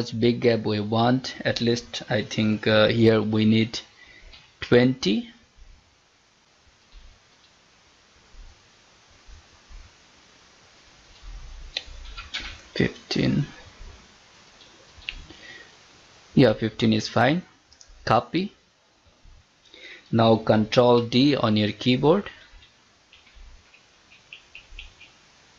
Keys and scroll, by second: 19.4 ctrl+d.